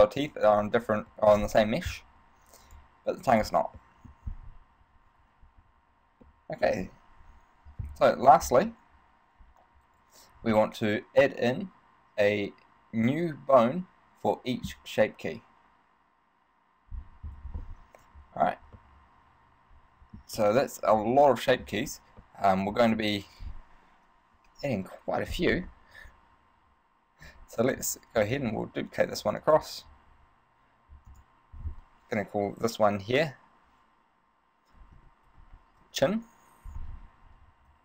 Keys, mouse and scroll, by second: 1.3 shift+middle click, 2.9 right click, 4.0 shift+middle click, 6.5 shift+middle click, 19.0 middle click, 20.6 middle click, 22.5 middle click, 24.5 KP_3, 28.5 shift+d, 29.7 click, 31.3 click.